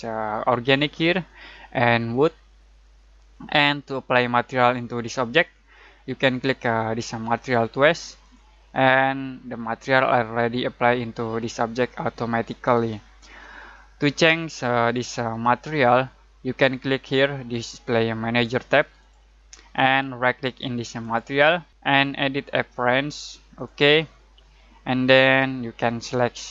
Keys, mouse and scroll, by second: 0.5 click, 8.0 click, 19.0 click, 21.0 right click, 23.5 click.